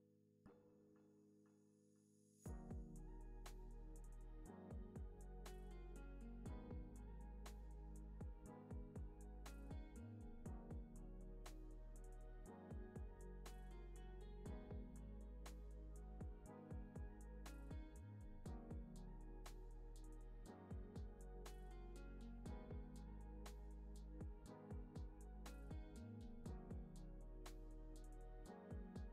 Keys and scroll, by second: 4.8 space, 5.1 super+s, 10.9 space, 14.7 space, 15.1 super+s, 25.3 u, 28.6-29.1 typing.